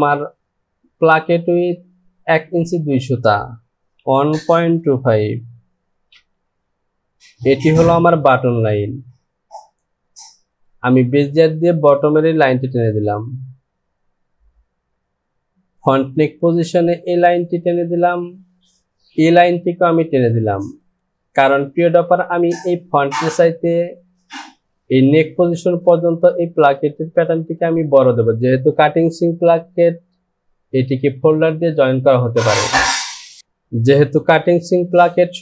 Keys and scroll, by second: 4.0 KP_1, 4.5 KP_1, 4.9 KP_Decimal, 5.2 KP_2, 6.1 Return.